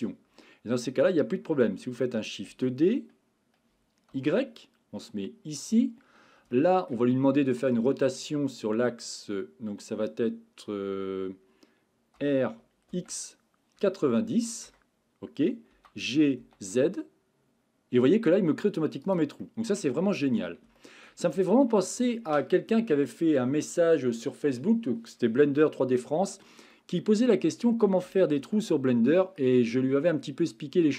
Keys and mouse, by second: 0.5 middle click, 2.6 shift+d, 4.1 y, 5.6 click, 6.6 shift+middle click, 7.1 middle click, 7.9 shift+middle click, 12.2 r, 12.9 x, 13.8 KP_9, 14.2 KP_0, 14.7 KP_Enter, 15.7 g, 16.4 z, 19.0 click, 19.4-20.4 middle drag, 20.8 shift+middle click, 21.3 middle click, 26.7 middle click, 28.5 shift+middle click, 29.4-30.9 middle drag.